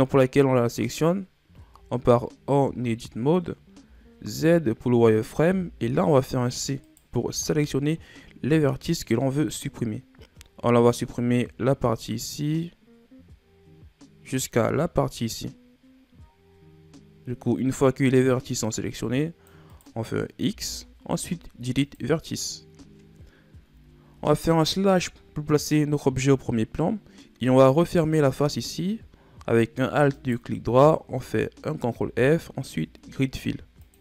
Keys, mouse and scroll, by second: 1.8 Tab, 3.5-4.0 ctrl+scroll up 1, 4.0 z, 5.6 c, 7.0 right click, 7.4 c, 20.6 x, 23.8 z, 25.0 KP_Divide, 27.0-28.0 middle drag, 28.0-28.4 shift+scroll down 3, 28.4-30.3 middle drag, 30.3 alt+right click, 32.1 ctrl+f.